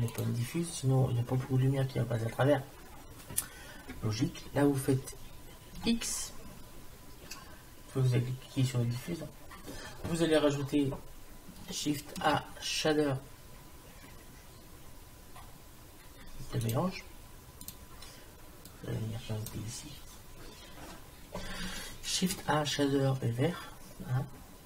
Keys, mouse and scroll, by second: 5.8 x, 12.2 shift+a, 18.7-20.6 drag, 22.3 shift+a.